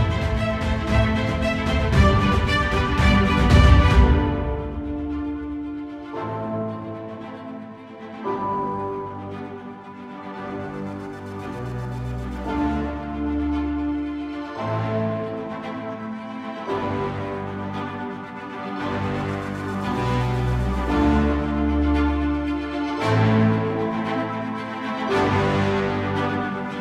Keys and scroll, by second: 1.2 ctrl+i, 1.7 ctrl+i, 7.8 ctrl+i, 9.0 ctrl+z, 16.4 ctrl+z, 19.7 ctrl+z, 20.2 typing.